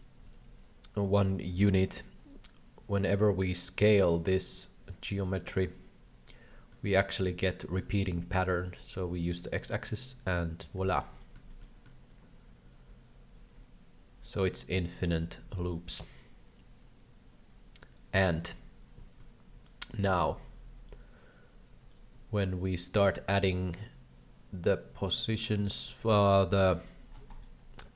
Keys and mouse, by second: 7.3 shift+click, 8.2 shift+click, 9.0-10.7 shift+drag, 11.0 shift+middle click, 11.4 shift+middle click, 12.7 shift+click, 13.6-18.1 shift+drag, 18.4 shift+middle click, 19.8-21.9 shift+drag, 23.3 click, 26.3 alt+a, 26.8 middle click, 27.2 shift+middle click.